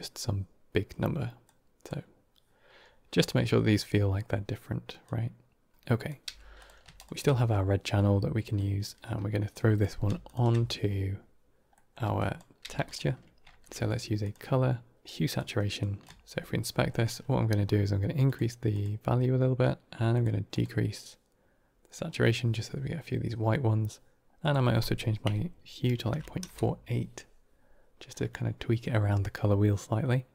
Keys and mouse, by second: 1.3 click, 5.0 click, 6.1 g, 6.8 click, 8.4 middle click, 9.4 click, 10.1 ctrl+shift+click, 11.6 middle click, 12.0 drag, 12.5 g, 13.4 shift+a, 15.6 drag, 16.1 ctrl+shift+click, 16.8 middle click, 18.1 click, 18.6 click, 20.0 click, 20.4 click, 24.4-26.8 drag, 29.9-30.3 middle drag.